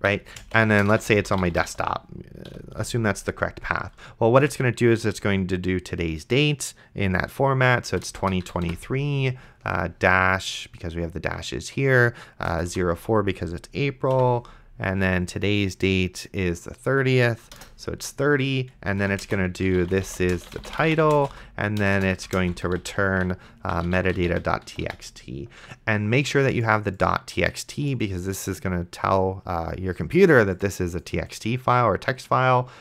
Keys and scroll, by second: 0.0-2.5 typing, 8.1 KP_0, 8.2 KP_2, 8.4 KP_3, 8.7 -, 12.5 KP_0, 12.7 KP_4, 14.1 -, 17.4 KP_3, 17.6 KP_0, 18.7-25.4 typing.